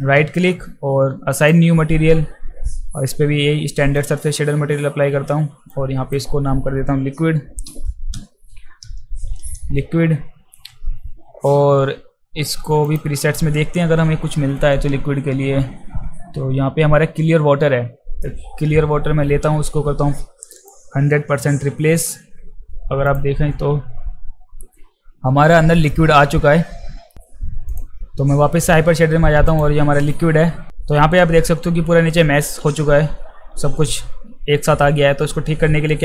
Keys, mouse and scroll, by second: 4.0 click, 5.7 click, 8.5 q, 9.2 d, 12.8 click, 20.6 click, 23.0 click, 27.7 click, 29.5 click, 32.8 alt+middle click.